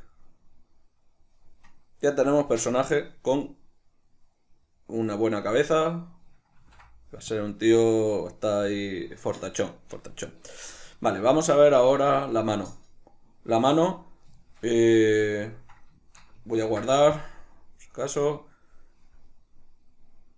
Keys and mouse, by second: 6.7 ctrl+s, 9.9 middle click, 10.7-16.1 shift+middle drag, 16.8 ctrl+s.